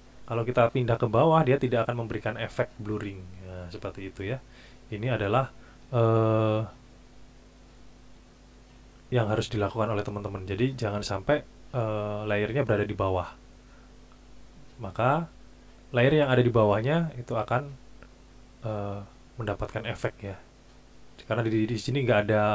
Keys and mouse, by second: 1.2 click.